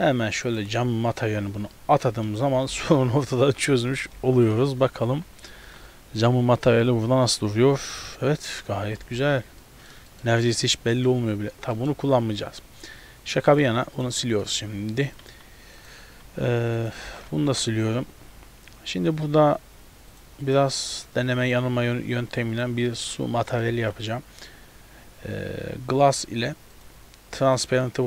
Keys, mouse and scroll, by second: 1.3 middle click, 2.7 KP_0, 3.5 scroll down 1, 4.2 ctrl+b, 5.1 z, 5.6 a, 5.7 a, 5.8-6.5 scroll up 1, 7.2-7.9 scroll up 1, 9.1 z, 9.7 middle click, 10.2 shift+middle click, 10.5 right click, 11.0 middle click, 11.4-12.1 scroll down 4, 11.8 middle click, 12.7-13.2 scroll down 1, 13.6 click, 14.0 click, 14.5 middle click, 14.8-15.2 scroll up 3, 15.2 click, 15.8 click, 16.3 a, 16.5 a, 16.8 click, 17.1 x, 17.5 shift+a, 20.9 click, 22.2 click, 22.9 middle click, 23.2 scroll up 1, 23.7 scroll up 1, 23.8 shift+a.